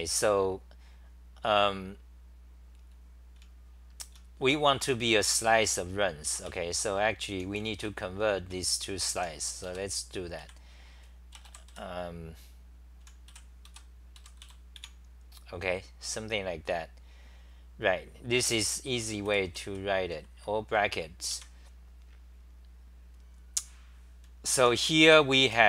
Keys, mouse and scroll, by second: 3.4-4.2 t, 6.0-10.4 typing, 13.4-15.3 typing, 19.9-20.8 typing, 21.3 Home, 24.3-25.6 typing.